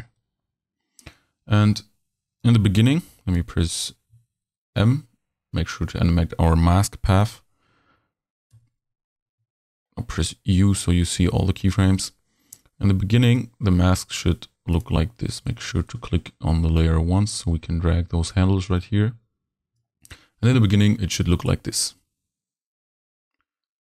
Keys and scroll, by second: 3.4 u, 4.8 m.